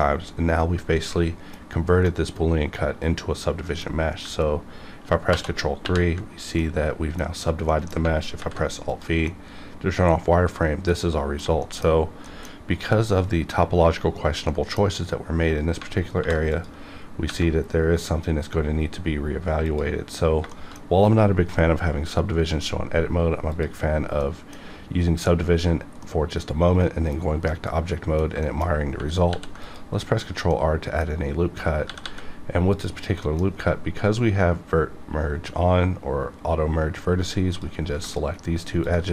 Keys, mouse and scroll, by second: 2.1-5.3 middle drag, 5.3 ctrl+2, 5.8 ctrl+3, 6.5 middle click, 8.3 alt+v, 8.8 click, 9.2-11.6 middle drag, 11.6 shift+middle click, 12.2 middle click, 12.8-14.5 scroll up 1, 14.7 middle click, 16.2 alt+v, 16.5 click, 16.9-17.3 scroll down 1, 19.7 click, 20.5 shift+middle click, 23.6 click, 24.2-26.0 middle drag, 26.0-27.5 middle drag, 27.5 middle click, 29.2 ctrl+r, 29.6 click, 29.9 right click, 30.5-31.8 middle drag, 31.8 g, 32.0 g, 32.7 click, 33.2 middle click, 37.6 click, 38.0 shift+click.